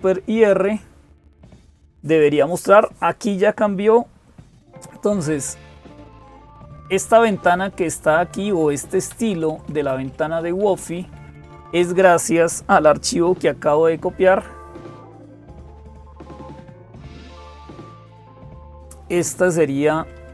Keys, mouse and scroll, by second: 0.0-20.3 typing.